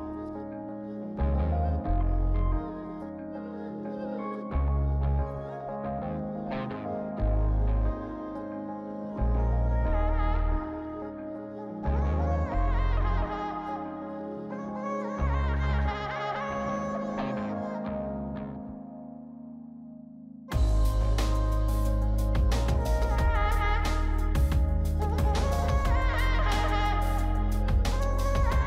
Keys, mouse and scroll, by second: 6.0 double click, 10.7 scroll up 3, 12.0 scroll down 2, 13.4-13.9 scroll down 1, 15.1 double click, 16.8-17.6 scroll up 3, 17.6 scroll down 2, 18.2 scroll up 2, 19.4-19.9 scroll down 2, 19.9 middle click, 20.1 middle click, 20.4 scroll up 2, 20.9 scroll down 3, 23.3 scroll up 2, 24.2-25.4 scroll down 3.